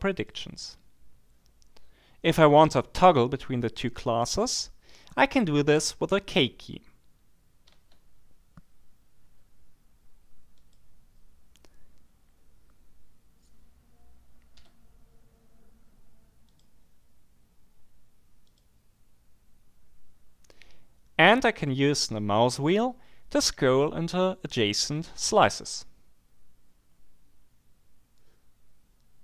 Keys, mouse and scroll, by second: 0.1 click, 7.7 k, 10.5 click, 14.5 k, 16.5 click, 18.4-19.0 scroll up 2, 26.7-27.9 scroll up 2.